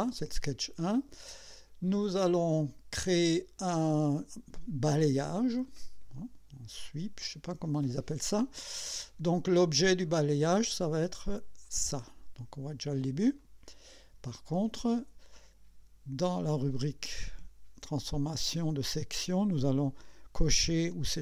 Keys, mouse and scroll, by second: 6.2 click, 10.1 click, 11.6 click, 12.6 scroll up 1, 13.4 click, 17.1 click.